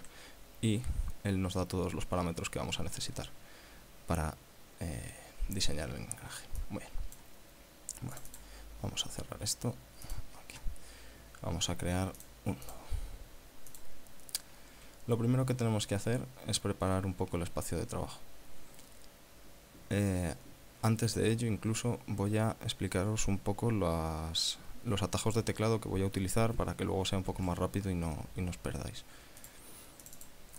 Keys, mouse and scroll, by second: 6.7 click, 8.3 click, 10.2 click, 12.3 click, 12.8 click, 13.8 click, 29.5 click, 30.1 click.